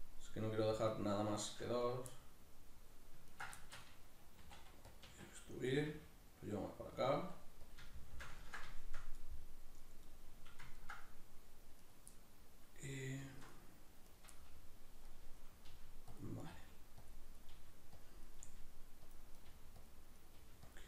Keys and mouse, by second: 1.8 right click, 2.2-3.3 middle drag, 3.3 ctrl+right click, 3.6-5.0 shift+middle drag, 4.4 e, 5.0 click, 5.1 s, 5.8 click, 5.9 g, 7.1 click, 7.2 s, 7.8 click, 7.9-11.8 shift+middle drag, 11.8 right click, 12.2-14.1 middle drag, 14.1 right click, 14.4-16.2 middle drag, 15.7 g, 16.2 click, 16.4 right click, 16.6 g, 17.1 click, 17.4 right click, 17.6 g, 18.1 click, 18.3 right click, 18.4 g, 19.2 click, 19.4 right click, 19.5 g, 19.9 click, 20.2 right click, 20.4 g, 20.8 click.